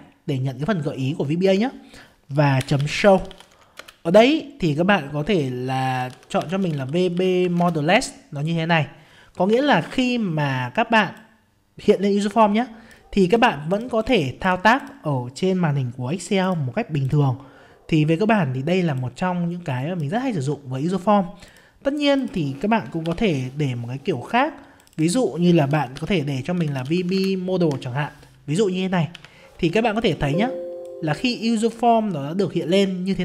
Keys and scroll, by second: 7.6 ctrl+space, 9.5 F5, 23.0 alt+F11, 27.2 ctrl+space, 29.1 F5.